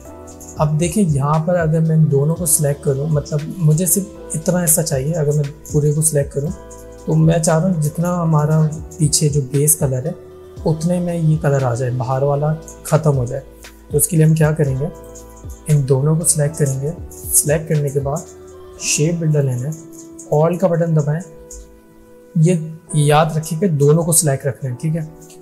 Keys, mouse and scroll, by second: 2.3 click, 5.1 drag, 6.0-6.8 space, 6.5 space, 6.7 space, 7.2 space, 9.4 space, 9.7 space, 10.9 space, 15.0-16.3 drag, 19.3 click.